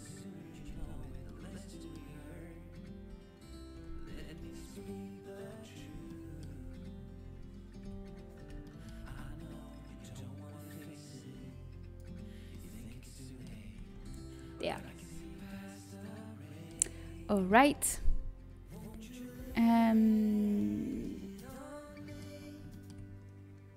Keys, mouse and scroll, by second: 1.2 l, 3.3 l, 4.3 z, 4.3 KP_7, 5.7 z, 6.4 z, 7.7 KP_3, 10.6 click, 11.2 right click, 12.1-14.0 middle drag, 14.0 Tab, 14.0 a, 15.4-16.7 middle drag, 22.3 middle click.